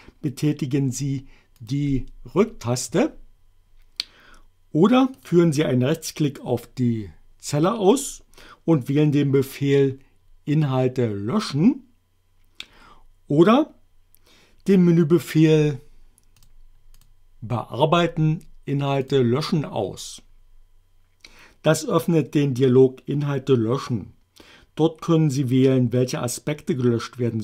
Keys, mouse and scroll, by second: 1.6 click, 2.2 BackSpace, 5.1 click, 7.9 right click, 16.4 click, 17.0 click, 19.0 click.